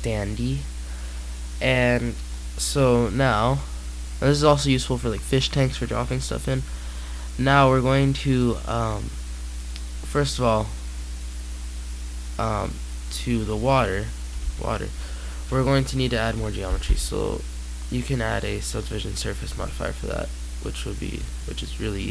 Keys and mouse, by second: 0.3 middle click, 2.1-3.9 drag, 7.5 click, 10.0-12.3 drag, 12.3-14.0 middle drag, 14.3 z, 15.5-17.1 drag.